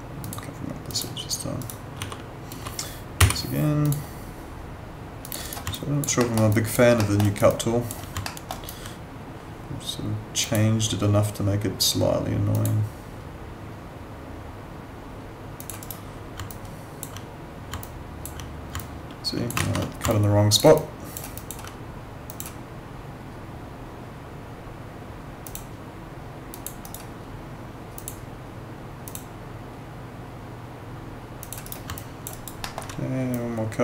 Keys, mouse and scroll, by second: 0.2 click, 1.6 right click, 2.0 w, 3.2 y, 3.8 click, 5.4 right click, 5.7 alt+click, 6.2 alt+middle click, 6.5 alt+click, 7.0 alt+middle click, 7.2 alt+right click, 7.5 alt+click, 8.3 alt+middle click, 8.5 alt+right click, 10.4 click, 15.6 click, 15.8 right click, 16.5 alt+click, 17.8 alt+click, 18.8 alt+click, 20.8 alt+click, 25.4 click, 26.8 right click, 27.9 click, 31.6 right click, 31.9 alt+click, 32.3 alt+right click, 32.6 alt+middle click, 33.3 click.